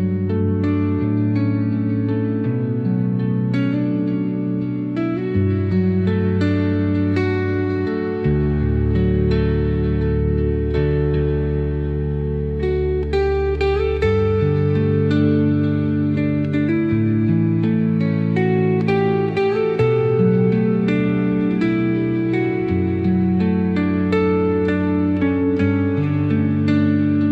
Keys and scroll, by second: 0.9 BackSpace, 1.3 Caps_Lock, 9.4 ctrl+k.